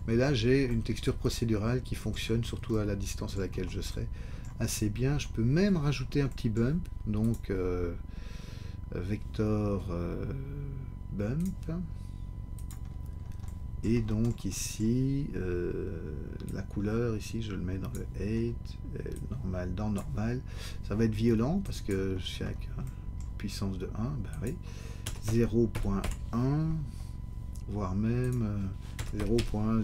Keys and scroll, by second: 25.0 0, 25.2 ., 25.7 1, 26.0 Return.